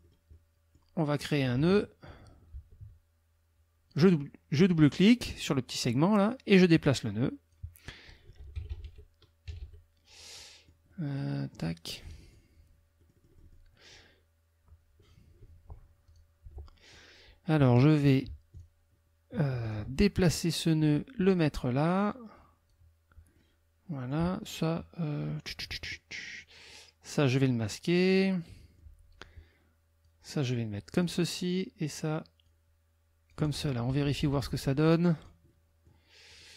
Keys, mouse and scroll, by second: 1.6 ctrl+z, 2.5 ctrl+z, 3.9 click, 6.6-7.7 drag, 8.5 KP_Subtract, 9.5 KP_Subtract, 10.3-11.3 drag, 11.5-12.5 drag, 13.0 click, 16.1 click, 16.4 Delete, 18.5 ctrl+click, 19.6 ctrl+click, 20.6-22.9 drag, 23.3 middle click, 23.9 click, 27.2-28.9 drag, 30.0-31.2 drag, 32.4-33.7 drag, 33.9 -, 35.1 click, 35.5 middle click, 36.0 click, 36.3 click.